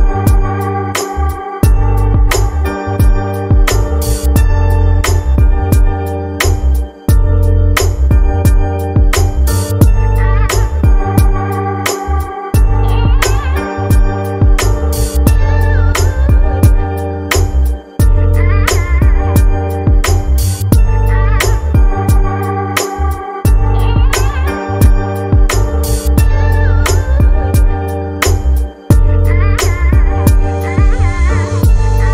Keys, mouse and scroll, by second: 2.0 click, 3.4-6.7 drag, 9.0-9.4 scroll down 5, 10.4 scroll down 1, 11.0 scroll down 2, 12.2-13.3 drag, 14.0-19.1 middle drag, 19.1-19.9 drag, 23.9 click, 26.4 click, 28.4-30.4 drag.